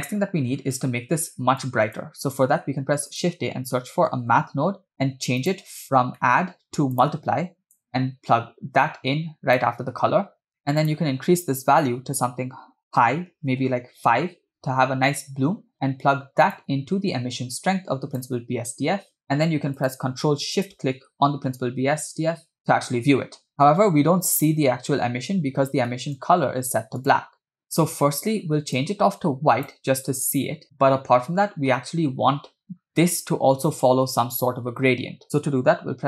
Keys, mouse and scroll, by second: 0.1-0.5 scroll down 3, 0.8 click, 1.6 click, 2.6 shift+a, 6.0 scroll up 3, 6.2 middle click, 6.2 scroll down 1, 6.9-10.1 drag, 10.7 middle click, 10.8-13.7 drag, 16.5-18.3 drag, 19.9 click, 20.9 ctrl+shift+click, 22.1-22.7 scroll down 7, 23.5 middle click, 23.7 scroll up 2, 25.7 scroll up 2, 25.9 middle click, 26.2 scroll up 2, 27.0 click.